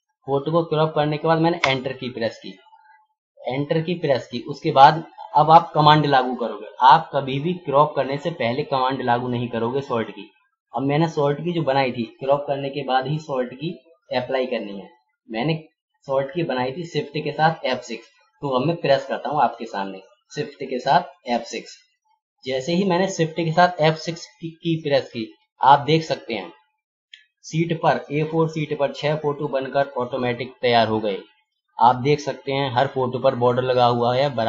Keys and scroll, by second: 21.6 shift+F6, 28.4 ctrl+=, 29.8 ctrl+scroll up 1.